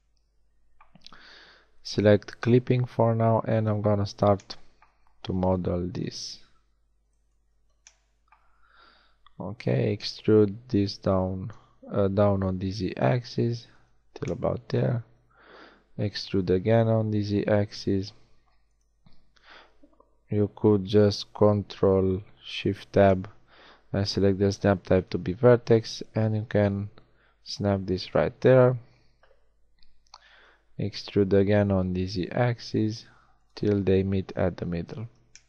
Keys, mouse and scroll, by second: 1.7-3.6 middle drag, 3.6 KP_1, 5.8 z, 6.5 a, 6.9 b, 9.5 e, 15.1 e, 22.5 ctrl+shift+Tab, 27.0-30.1 drag, 30.1 e.